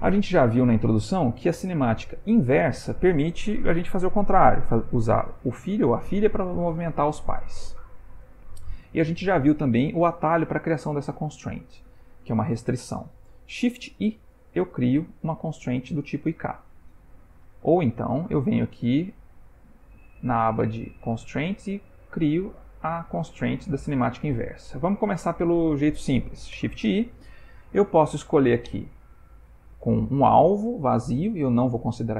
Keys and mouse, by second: 6.4 click, 7.7 click, 14.3 shift+i, 20.5 click, 21.7 click, 26.5 shift+i.